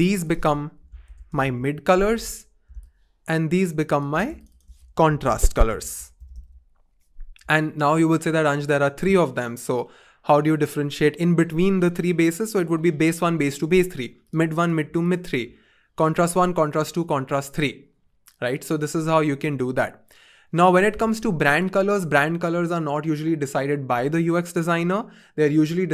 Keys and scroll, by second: 0.8-1.9 typing, 5.3-6.9 typing.